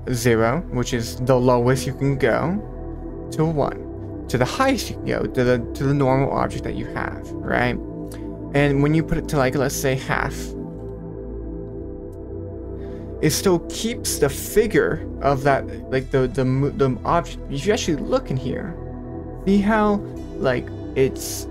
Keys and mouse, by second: 0.3 click, 1.5-2.3 middle drag, 3.1-3.6 drag, 3.9 middle click, 8.1-9.1 drag, 9.6-12.2 drag, 11.3 BackSpace, 11.5 BackSpace, 11.8 BackSpace, 13.2 middle click, 17.8-19.5 middle drag.